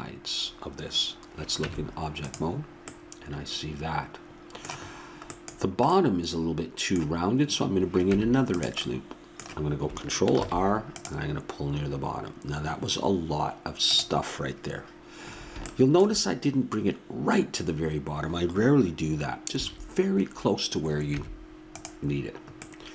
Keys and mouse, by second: 1.6 Tab, 2.9 middle drag, 3.1 middle click, 3.5 middle click, 3.7 middle click, 5.3-8.0 middle drag, 8.0 Tab, 10.4 ctrl+r, 19.5 a, 21.1 Tab.